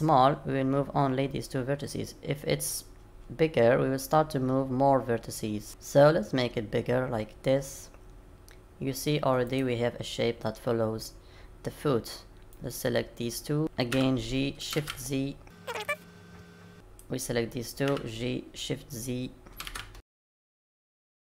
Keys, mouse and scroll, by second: 12.5 click, 13.9 g, 16.7 click, 17.8 g, 20.4 click, 20.5-21.4 typing, 20.8 click.